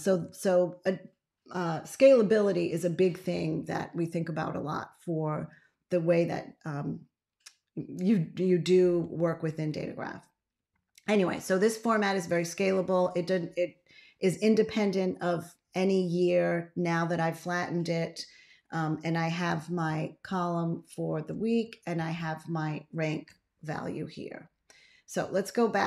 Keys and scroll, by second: 19.7 ctrl+a, 21.8 ctrl+a.